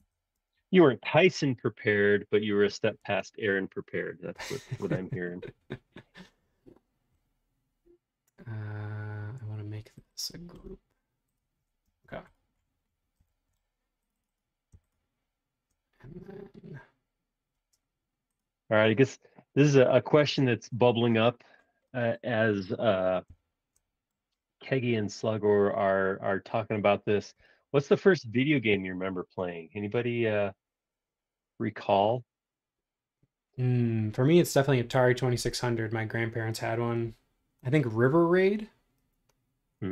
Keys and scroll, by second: 0.1 Return, 0.4 space, 11.9 space, 21.3 Escape, 28.4 super+1.